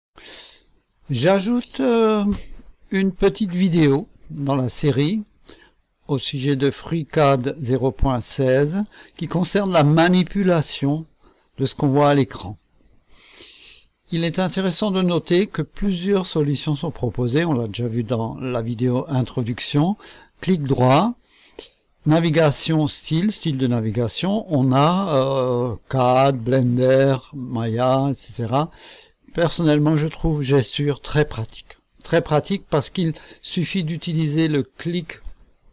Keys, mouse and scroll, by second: 5.0 click, 6.7 click, 8.7 click, 10.0-14.3 drag, 14.5 right click, 20.3 right click, 35.2 click.